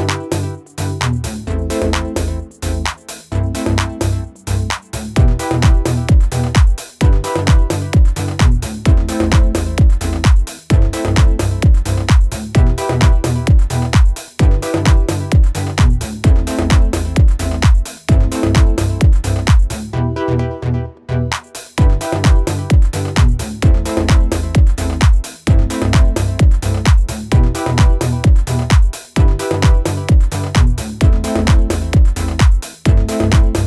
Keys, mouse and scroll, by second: 4.9 click, 8.3-9.0 alt+scroll down 3, 10.1 space, 10.3 click, 10.7 space, 11.3-11.8 alt+scroll down 1, 11.8-12.1 scroll down 1, 16.0 click, 16.1 scroll up 1.